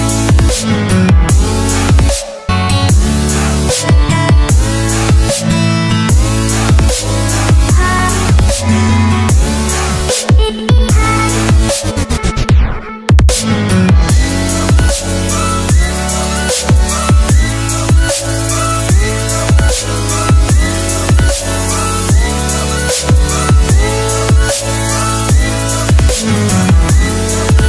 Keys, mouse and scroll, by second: 4.2 Return, 6.0 alt+Num_Lock, 6.0-7.9 alt+scroll up 6, 7.9 click, 8.8 Return, 9.6-11.8 typing, 12.2 click, 12.7 ctrl+t, 13.0 click, 15.2 Return, 15.4 Left, 15.8 Right, 16.1 click, 17.2-21.1 typing, 21.6 click, 21.8 Left, 22.5 click, 24.3-27.6 typing.